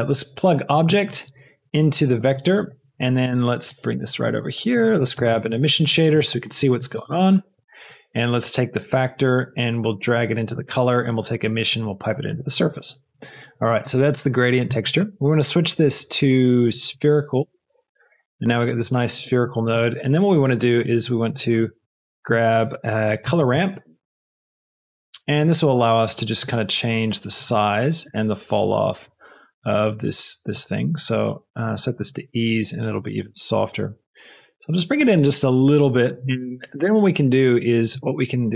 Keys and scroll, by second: 5.2 shift+a, 6.1 shift+e, 6.3 m, 6.9 Return, 23.2 shift+c, 23.3 o, 23.5 l, 24.3 Down, 24.4 Return.